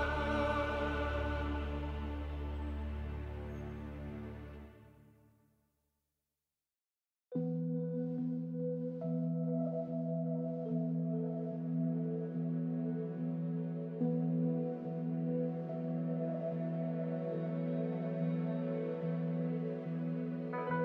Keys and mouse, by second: 1.4 alt+shift+click, 3.0 click, 3.4 shift+click, 4.3-7.1 alt+shift+drag, 8.3 alt+shift+click, 9.6 shift+click, 11.0 alt+shift+click, 11.5 alt+shift+click, 12.7 alt+shift+click, 16.8 click, 18.4 click, 20.1 click.